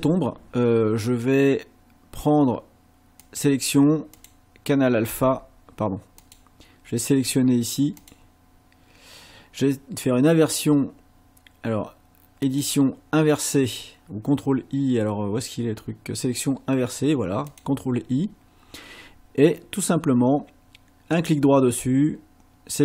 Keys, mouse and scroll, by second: 3.2 click, 4.2 click, 6.2 click, 8.0 click, 12.4 click, 17.5 click, 21.2 right click.